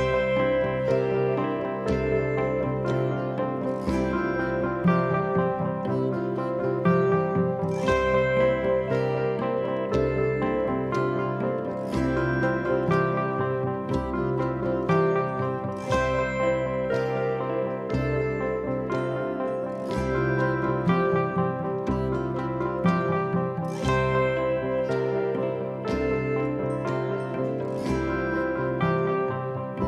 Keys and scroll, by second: 0.5 p, 1.8 p, 2.7 p, 3.7 4, 5.2 ctrl+z, 7.0 3, 12.5 l, 14.4 k, 16.9 _, 17.0 Return, 18.7 l, 20.6 k, 22.3 _, 22.5 Return, 25.4 ctrl+z, 26.9 ctrl+z, 28.4 ctrl+z.